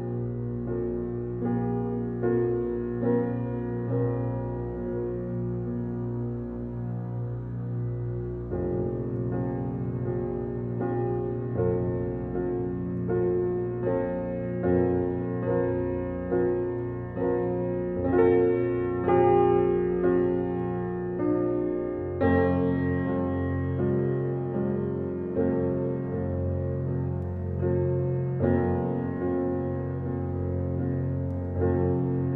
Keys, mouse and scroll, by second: 1.8 ctrl+d, 2.6-32.3 drag.